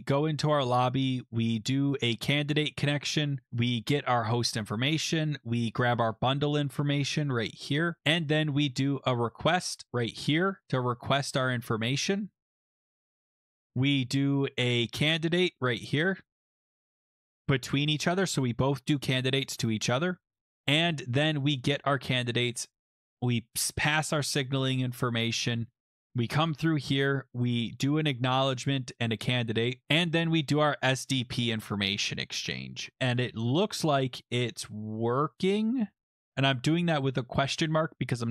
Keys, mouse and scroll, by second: 0.8 click, 1.3 middle click, 1.4 scroll, 2.8 scroll, 7.6 click, 7.8-11.4 scroll, 12.7 click, 12.9-13.4 scroll, 16.3 click, 19.9-20.3 scroll, 23.1 scroll, 24.7-25.1 scroll, 25.6-26.9 scroll, 29.3-29.8 scroll, 33.4-35.6 scroll, 36.7-37.1 scroll.